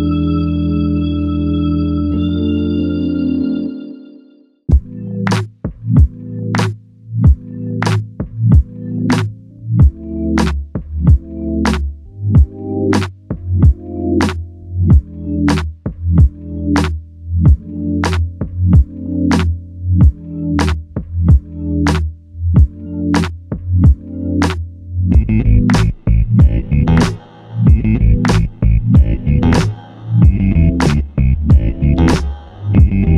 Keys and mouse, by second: 1.1 shift+click, 6.2 double click, 7.7 ctrl+click, 9.8 double click, 12.0 ctrl+click, 13.1 shift+click, 15.1 shift+click, 18.0 f, 18.7 double click, 21.1 shift+click, 24.0 shift+click, 25.7 ctrl+alt+click, 26.3 alt+click, 28.4 alt+click, 28.6 shift+click, 30.9 alt+click.